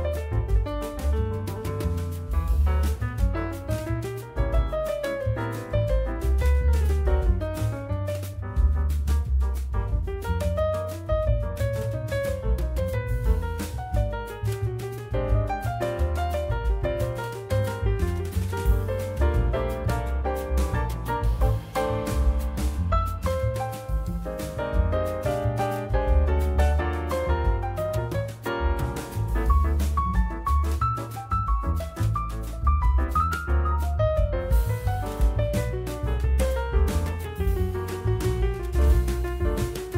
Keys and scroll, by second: 0.4 alt+1, 2.7 alt+1, 5.3 2, 5.8 F4, 7.7 F4, 8.5-9.3 typing, 11.2 F4, 12.4 alt+1, 14.0 ctrl+z, 16.1 F4, 16.9 F4, 17.9 F4, 22.2 ctrl+alt+e, 24.2 F4, 24.7-26.2 typing, 29.0 alt+q, 29.7 F4, 31.7 F4, 34.3 alt+x, 35.2 alt+x, 36.9 F4.